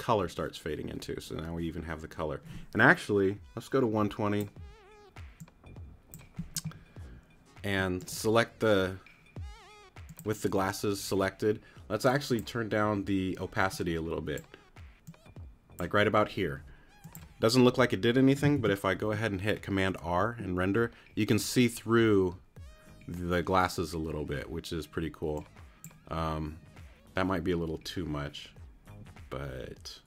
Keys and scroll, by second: 7.7 q, 18.6 super+r.